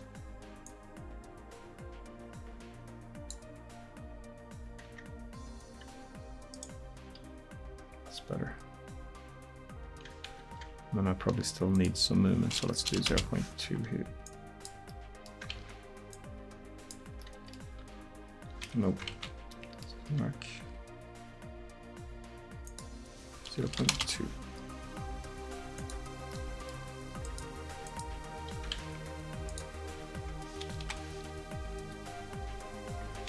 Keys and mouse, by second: 4.9 Tab, 7.1 r, 11.8-18.0 drag, 15.6 ctrl+z, 17.9 r, 19.2 ctrl+z, 22.7-30.9 drag, 28.8 ctrl+z, 30.9 KP_1, 31.8 r.